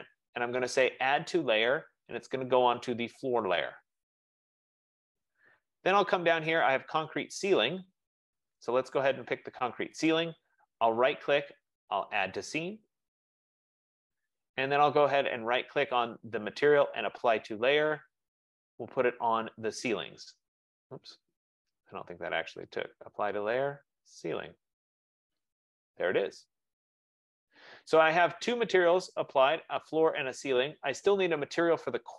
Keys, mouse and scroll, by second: 3.4 click, 9.3 click, 10.7 right click, 12.6 click, 15.6 right click, 19.4 F15, 21.4 right click, 24.9 click, 29.3-32.1 drag.